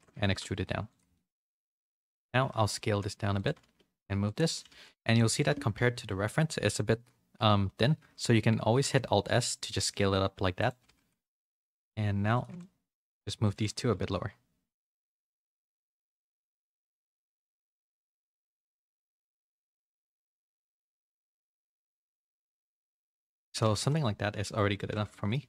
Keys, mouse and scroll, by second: 0.2 e, 1.1 middle click, 1.3 a, 1.6 middle click, 2.3 s, 3.5 g, 4.6 g, 5.7 KP_3, 6.4 z, 7.9 z, 8.7 alt+s, 10.8 g, 12.3 alt+click, 12.3 2, 12.5 middle click, 13.4 alt+shift+click, 13.8 g, 15.4 middle click, 15.8 a, 16.0 s, 16.7 Tab, 17.1 a, 17.2 middle click, 17.8 middle click, 18.2 Tab, 18.6 shift+middle click, 19.0 a, 19.7 middle click, 20.4 shift+middle click, 21.3 alt+s, 23.4 Tab, 23.6 a, 23.7 a, 23.8 middle click, 24.7 a, 24.8 a, 25.0 shift+middle click.